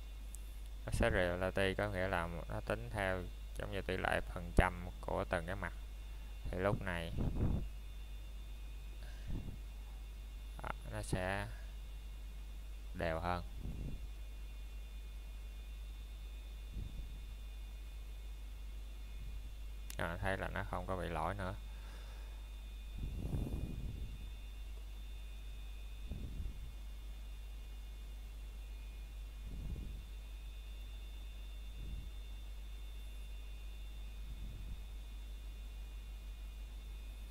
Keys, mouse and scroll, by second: 1.9-3.3 scroll up 1, 7.0 middle click, 7.5 scroll up 1, 14.2 scroll down 1, 14.8 middle click, 15.6-17.0 scroll up 1, 21.2 click, 24.2 middle click, 24.8 scroll down 1, 25.4 middle click, 25.8 scroll up 1, 29.0 click, 35.9 middle click, 36.1 scroll down 1, 36.8 middle click.